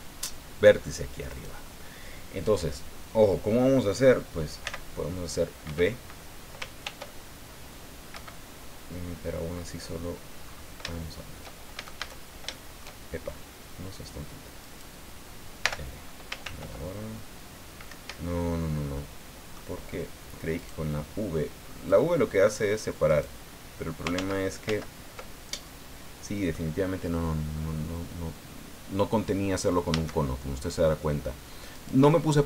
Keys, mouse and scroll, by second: 1.3 right click, 4.6 v, 5.6 Escape, 6.8 ctrl+r, 8.1 Escape, 10.4-10.7 scroll up 2, 10.9 shift+middle click, 11.7 shift+a, 12.5 shift+middle click, 14.6 right click, 15.6 l, 16.4 ctrl+r, 17.9 Escape, 19.0 middle click, 20.6 right click, 21.9-23.0 drag, 23.1 right click, 24.1 ctrl+z, 25.3 ctrl+scroll down 2, 25.6-26.7 drag, 27.6 scroll down 2, 29.9 a, 31.7 right click.